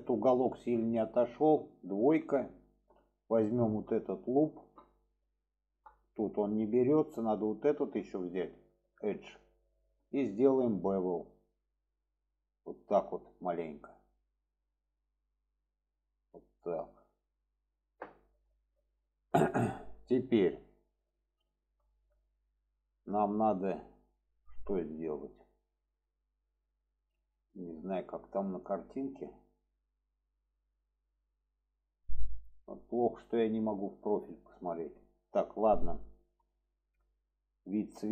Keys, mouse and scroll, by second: 0.3-1.3 middle drag, 2.3 middle click, 3.2 click, 3.9-4.3 middle drag, 4.8 middle click, 5.9 middle click, 7.7 shift+click, 8.2-9.2 middle drag, 10.6 click, 11.5 click, 19.0 shift+middle click, 20.5-20.9 middle drag, 21.4 shift+middle click, 22.0-22.3 middle drag, 22.6-27.7 middle drag, 28.8 middle click, 34.7 middle drag, 35.9-36.4 middle drag, 36.8-38.1 middle drag.